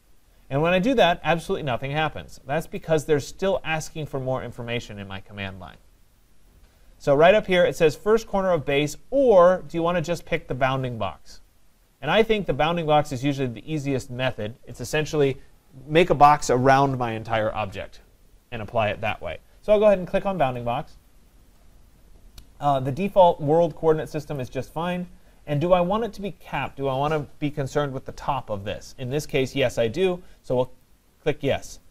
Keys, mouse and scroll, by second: 2.8 click, 20.6 click, 24.4 click, 30.8 click.